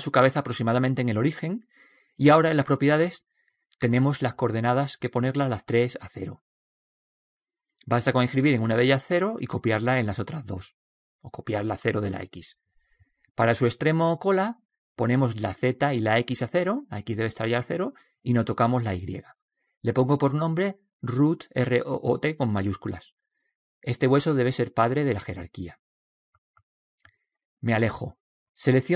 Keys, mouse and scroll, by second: 1.2-2.8 right drag, 2.8 click, 4.6 click, 8.3 ctrl+c, 9.7 ctrl+v, 10.6 ctrl+v, 15.4 ctrl+v, 17.9 ctrl+v, 20.1-21.8 drag, 21.6 shift+o, 24.0-25.6 drag, 28.6-28.9 middle drag.